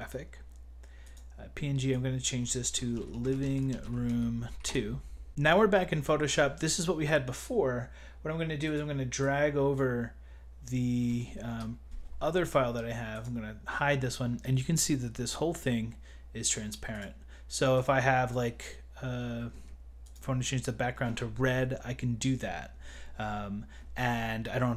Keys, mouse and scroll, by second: 2.3 click, 2.7-5.0 typing, 5.3 click, 8.7 click, 11.5 KP_Enter, 13.2 click, 16.9 click, 19.9 g, 20.0 click.